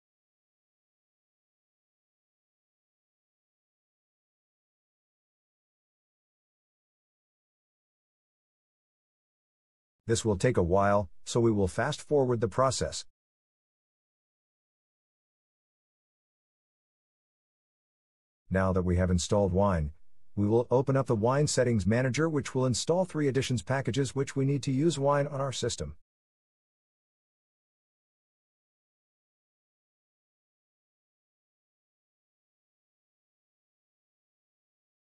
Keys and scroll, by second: 4.4 Return, 7.3 Return.